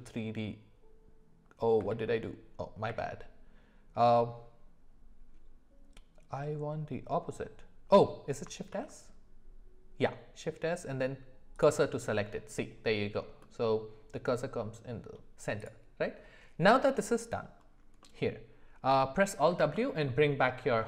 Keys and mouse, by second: 1.9 ctrl+z, 2.9 q, 8.7 shift+s, 13.4-15.0 middle drag, 18.0 middle click, 19.6 alt+w.